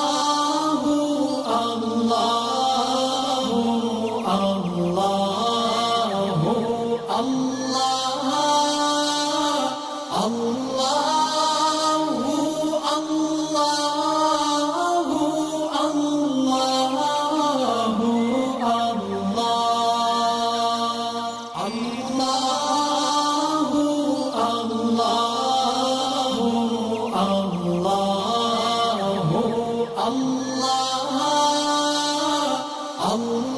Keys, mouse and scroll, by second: 0.3-2.6 alt+drag, 4.5 alt+scroll up 1, 6.8-7.5 click, 7.7 alt+scroll down 1, 8.4 alt+click, 9.4-9.9 alt+scroll down 1, 10.5 alt+scroll up 1, 11.4 space, 11.5 click, 13.2-13.5 alt+scroll up 1, 14.5-15.7 ctrl+alt+shift+click, 16.2-16.6 click, 17.3 alt+scroll down 1, 18.0 space, 18.5 alt+scroll up 1, 18.8 space, 18.9 click, 20.1-22.9 alt+drag, 23.1 alt+scroll down 2, 23.3 ctrl+g, 23.8 space, 23.8 click, 25.1-25.8 alt+click, 26.9-31.9 drag, 32.4-32.9 alt+scroll up 1, 33.2 space, 33.3 click.